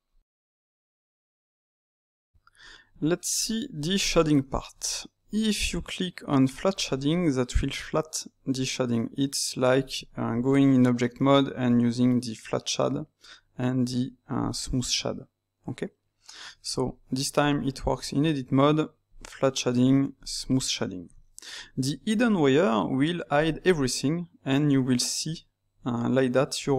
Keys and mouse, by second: 3.0-6.6 middle drag, 6.6-8.9 drag, 8.9 right click, 9.9 Escape, 11.2-14.3 right drag, 16.4 Tab, 19.1-21.2 drag, 21.2-23.3 ctrl+middle drag, 23.3 click, 25.8-26.7 middle drag.